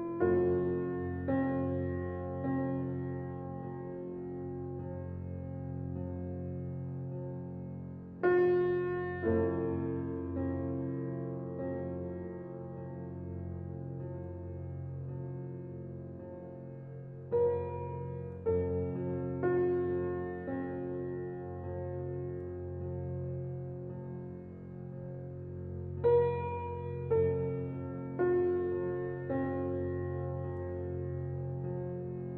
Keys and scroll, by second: 28.6 ctrl+g.